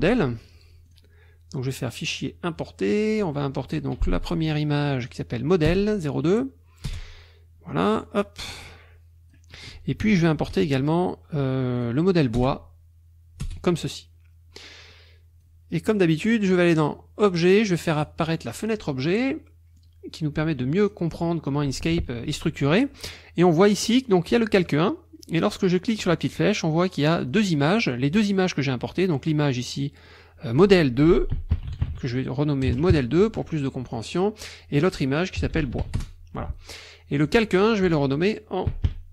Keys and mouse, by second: 0.9 click, 2.0 click, 2.9 click, 5.0 click, 5.7 Return, 6.9 Return, 8.0-9.5 drag, 10.5 ctrl+i, 11.8 click, 12.4 Return, 13.4 Return, 14.9-15.6 drag, 15.8 click, 16.8 click, 18.0 click, 19.8-21.1 drag, 22.7 click, 24.1 click, 24.7 click, 26.1 click, 27.2 click, 27.8 click, 28.4 click, 30.0 click, 31.1-32.7 typing, 32.9 KP_Enter, 34.0 click, 35.2-36.3 typing, 37.2 click, 38.5-39.1 typing.